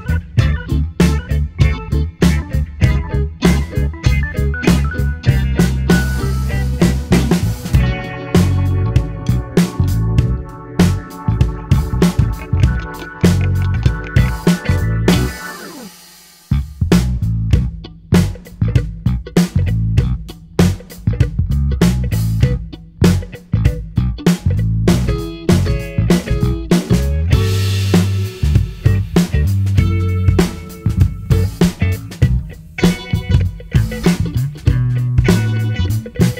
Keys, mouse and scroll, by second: 0.6 click, 2.8 click, 4.8 click, 6.7-8.2 scroll down 2, 8.2-10.1 drag, 10.1-12.4 middle drag, 12.4-15.4 drag, 16.7-19.6 drag, 19.6 middle click, 20.4 click, 20.8 space, 22.0 space, 26.2 space, 26.8 space, 27.2 click, 27.7 space, 29.4 space, 30.2-32.2 drag, 32.2-34.0 middle drag, 34.0-36.2 drag.